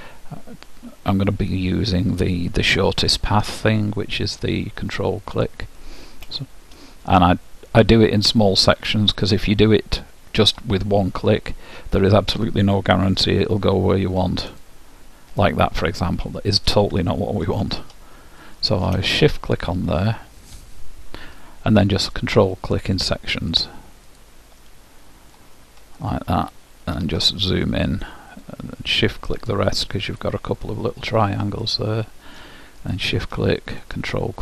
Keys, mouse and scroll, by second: 2.8-4.6 right drag, 3.8-5.5 middle drag, 8.7-10.5 middle drag, 14.7-16.4 drag, 17.9 ctrl+z, 18.5 middle click, 19.4-21.1 drag, 20.3-22.0 middle drag, 22.2-27.9 drag, 24.7-30.5 middle drag, 28.4-32.3 drag, 31.1-33.3 middle drag, 32.9-34.4 drag, 34.2-34.4 middle drag.